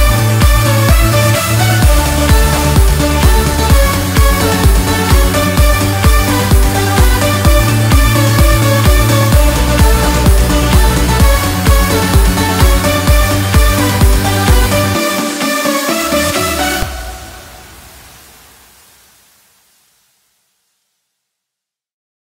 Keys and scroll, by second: 1.9 ctrl+x, 10.3 ctrl+t, 15.3 ctrl+g.